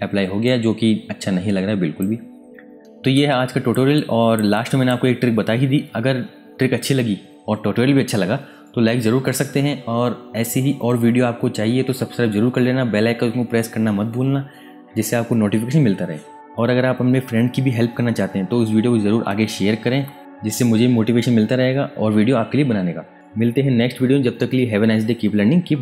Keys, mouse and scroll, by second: 3.1 click, 3.9 click, 6.7 ctrl+z, 8.3 typing.